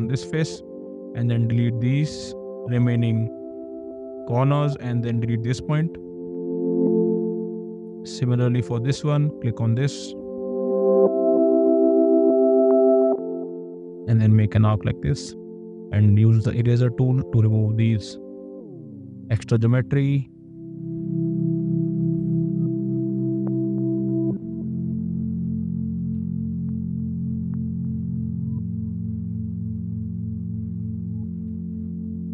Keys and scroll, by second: 0.5 e, 8.7 space, 15.5 e, 20.8 space, 26.4 e, 32.0 space.